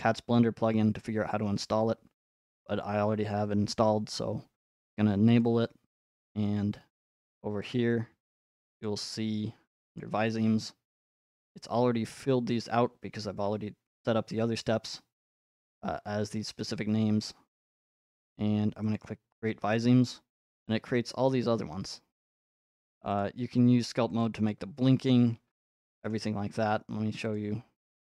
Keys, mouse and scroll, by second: 3.8 click, 5.4 click, 7.7 click, 8.8 click, 10.0 click, 18.9 click, 22.3 click, 23.2 click, 24.2 click, 26.1 middle click, 27.3 click, 27.3 scroll.